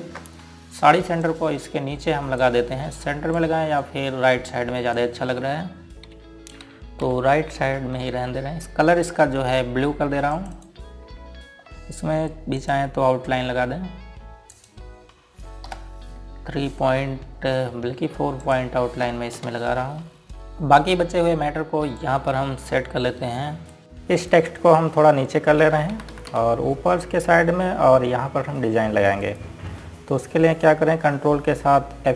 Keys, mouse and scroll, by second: 0.8 ctrl+g, 2.3 click, 7.7 Down, 8.1 Up, 9.3-10.2 scroll down 1, 10.2 scroll up 1, 11.4 click, 11.6 right click, 11.7 click, 12.7 scroll up 1, 13.7 click, 15.6 right click, 16.7 F12, 19.5 click, 20.4 scroll up 1, 20.5 click, 21.0 scroll up 1, 23.0 click, 26.7 Down, 30.9 click.